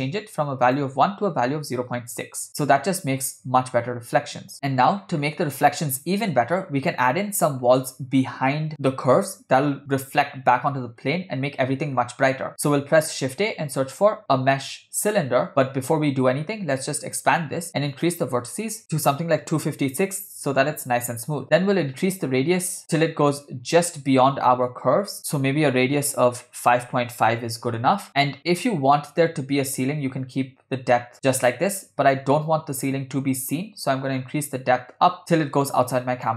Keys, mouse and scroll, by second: 3.5 scroll down 2, 3.9-4.5 scroll up 2, 4.7-5.2 scroll down 3, 5.2-5.7 scroll up 2, 11.1-11.7 scroll down 1, 11.7 scroll down 1, 12.1 scroll up 2, 13.0 shift+a, 17.0 click, 17.9-20.8 drag, 21.8-27.9 drag, 32.5-36.3 drag.